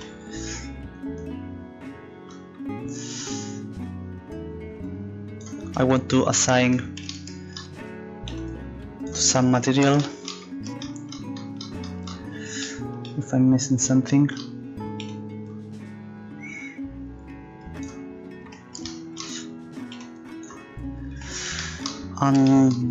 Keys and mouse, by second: 6.6-8.3 drag, 11.5-15.0 drag, 19.8-21.6 drag, 22.8 click.